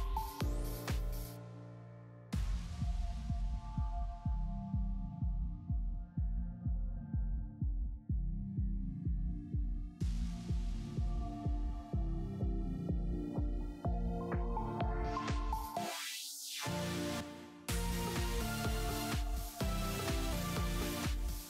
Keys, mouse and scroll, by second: 2.7-5.1 middle drag, 2.7-4.5 scroll up 2, 4.5 z, 5.1 click, 5.3 Tab, 5.6-14.2 middle drag, 7.0 scroll up 1, 7.3-7.6 scroll down 1, 7.6 Tab, 8.7 a, 10.0 Tab, 11.3 scroll up 2, 14.2 click, 14.2 KP_3, 14.5 middle click, 14.6 z, 15.1-18.8 middle drag, 20.1 middle click, 20.1 z, 20.5 Tab, 20.8-21.4 middle drag.